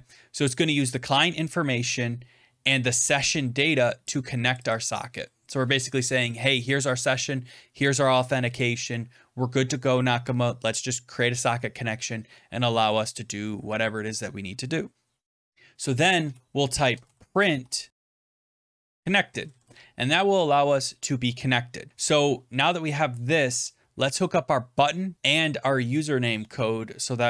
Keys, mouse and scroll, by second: 0.8 click, 0.9 click, 3.0 click, 3.2 click, 4.0 click, 4.4 click, 4.6 click, 15.0-15.4 scroll down 2, 15.5 click, 16.1 Return, 16.3-19.4 typing, 19.4 Right, 19.5 Right, 20.1 ctrl+s.